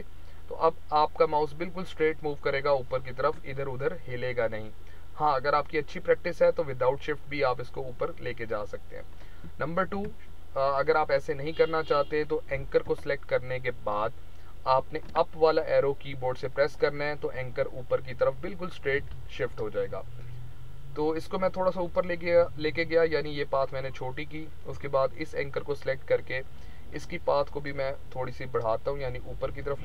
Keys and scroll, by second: 9.8 ctrl+z, 15.0 Up, 17.3 Down, 17.9 Up, 18.9 Down, 26.2 Up.